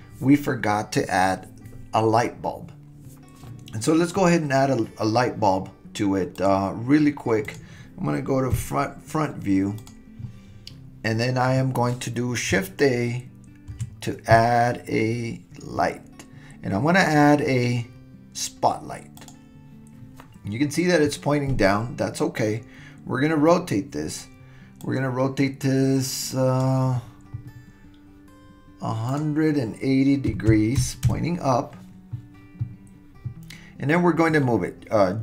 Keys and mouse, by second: 6.4 click, 7.5 click, 8.5 KP_1, 9.8 click, 13.7 shift+a, 24.8-26.6 drag, 29.2-31.7 drag.